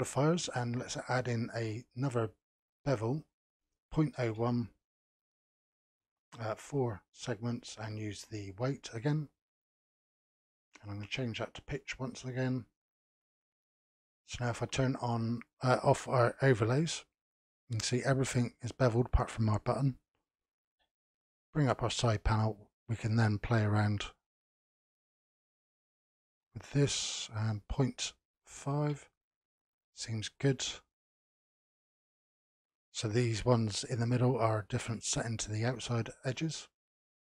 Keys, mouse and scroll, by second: 0.1-5.6 drag, 5.9-7.9 drag, 8.6 click, 10.6-13.6 drag, 15.3 click, 17.2-20.2 scroll down 1, 20.9 n, 22.4-25.4 drag, 27.7-30.3 drag, 32.2 click.